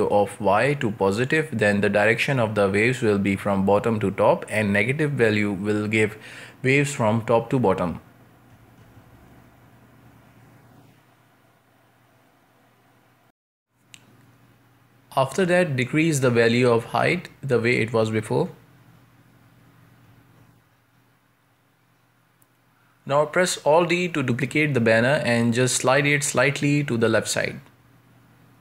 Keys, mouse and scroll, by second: 0.0 scroll down 1, 0.2-1.3 shift+middle drag, 1.3-13.6 drag, 13.6 scroll down 2, 13.9-15.3 middle drag, 15.3-21.3 drag, 21.3-21.8 middle drag, 21.8 scroll up 2, 22.1-23.9 shift+middle drag, 23.9 scroll up 2, 24.2-24.9 middle drag, 24.9 ctrl+space, 25.3-25.6 scroll down 4, 25.6-27.4 shift+middle drag, 27.4 alt+d.